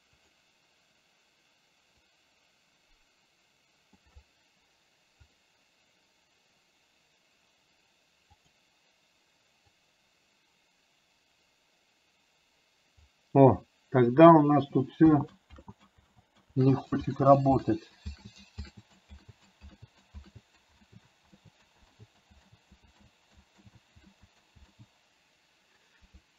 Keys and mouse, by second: 2.2-4.1 drag, 10.0-13.1 drag, 15.2 ctrl+z, 16.2 ctrl+z, 16.7 ctrl+z, 18.3 ctrl+z, 19.3 ctrl+z, 20.3 ctrl+z, 23.7 ctrl+z, 24.1 ctrl+z.